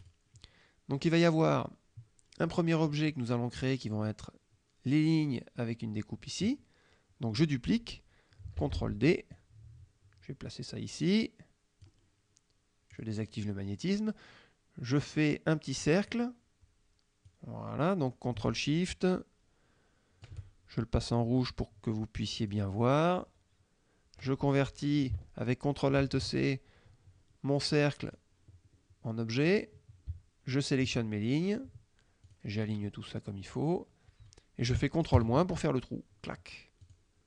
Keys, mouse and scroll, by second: 0.1 click, 2.6 middle click, 8.6 ctrl+d, 9.4-12.1 drag, 13.0 click, 15.9 click, 17.3-20.5 drag, 22.5 click, 26.1 ctrl+alt+c, 28.1 click, 29.6 click, 30.6 shift+click, 32.3 click, 32.7 click, 35.2 ctrl+KP_Subtract, 36.9 click.